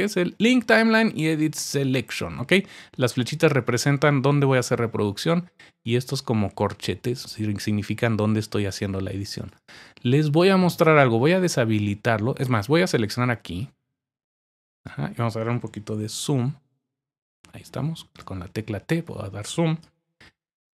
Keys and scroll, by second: 17.0-18.1 typing.